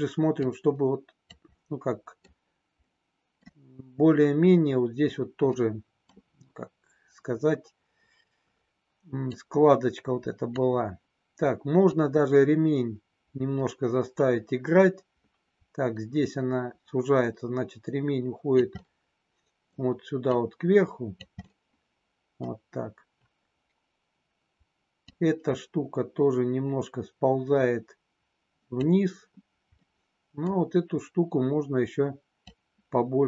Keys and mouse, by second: 0.4 click, 1.4 middle click, 2.8 middle click, 5.5 middle click, 9.3-10.5 drag, 11.9-18.5 drag, 18.7 middle click, 20.3 click, 21.3 middle click, 25.2-28.8 drag, 29.8 middle click, 32.4-33.2 drag.